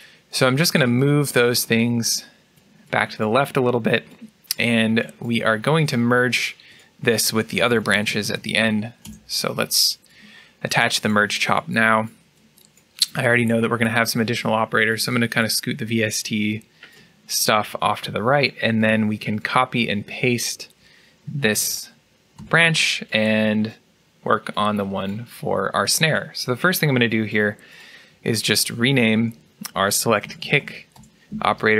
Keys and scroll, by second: 21.4 ctrl+c, 22.2 ctrl+v, 29.9 BackSpace.